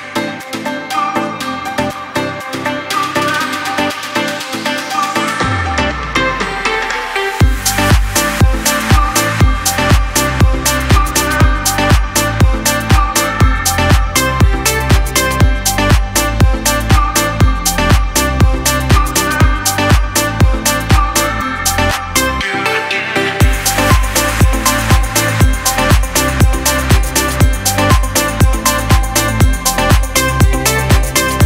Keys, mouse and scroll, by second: 12.9-16.8 drag, 17.2 space, 17.3 click, 17.7 space, 18.5 click, 19.3 Left, 20.2 Left, 20.8 click, 21.3 space, 21.4 click, 21.8 space, 22.9 click, 24.5 Up, 25.9-27.9 drag, 27.9 alt+scroll up 1, 28.6-31.4 drag.